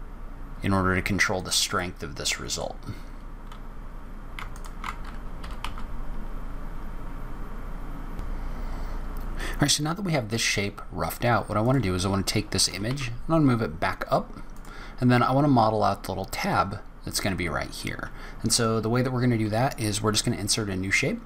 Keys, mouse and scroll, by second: 1.7 middle click, 4.4 alt+click, 5.3 g, 11.5 click, 12.6 g.